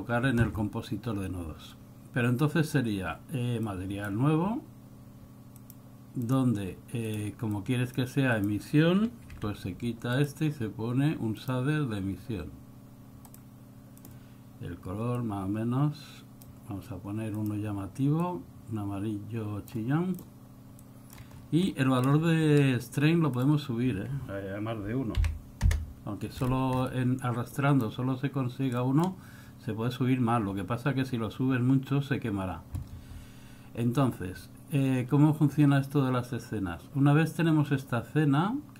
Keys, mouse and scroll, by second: 3.8 click, 5.6 click, 6.4 click, 7.1 click, 7.6 click, 8.5 click, 9.4 x, 10.2 click, 15.3 click, 17.4 click, 20.3 click, 20.9 click, 21.5 scroll up 6, 21.7 middle click, 22.3-22.8 scroll up 5, 23.4 click, 26.5-27.1 scroll down 7, 27.6 click, 28.8 middle click, 29.3-30.0 scroll up 3.